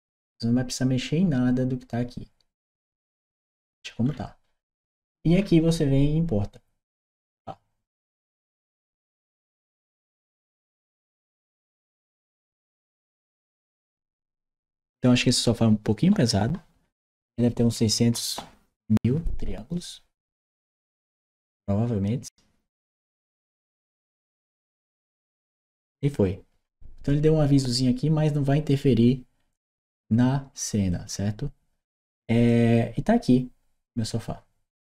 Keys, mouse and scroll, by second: 2.9 middle click, 2.9-3.6 scroll down 1, 3.9-5.6 middle drag, 3.9-5.6 scroll down 1, 6.8 click, 30.7 click, 32.2 click.